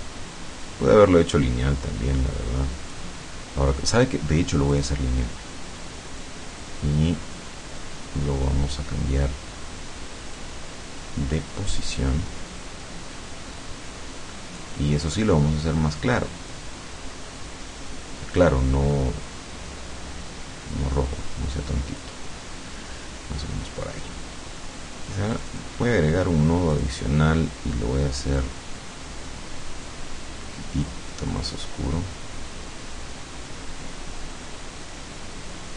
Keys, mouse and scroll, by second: 4.8 click, 10.4-11.6 drag, 12.0-14.8 drag, 16.5-22.2 drag, 25.4 click, 26.8 click, 29.9-35.7 drag.